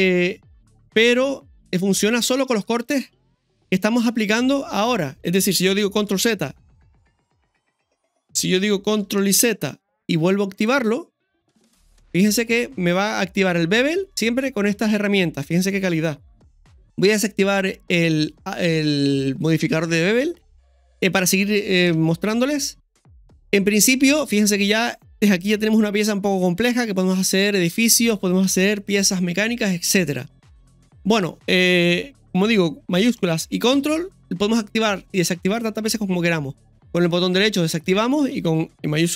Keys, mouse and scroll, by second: 0.0 click, 0.4 click, 1.5 click, 1.7 scroll up 1, 1.9 scroll down 2, 2.4 middle click, 3.4 KP_1, 6.2 ctrl+shift+z, 9.2 ctrl+shift+x, 12.2 middle click, 14.0-14.4 scroll down 1, 14.4-15.7 middle drag, 16.2 KP_1, 16.4 click, 19.8 click, 20.9-21.9 scroll up 1, 21.9 right click, 22.7 KP_1, 22.9-23.3 scroll down 1, 24.3-27.7 middle drag, 28.4 KP_4, 28.4 KP_1, 33.7 ctrl+shift+x.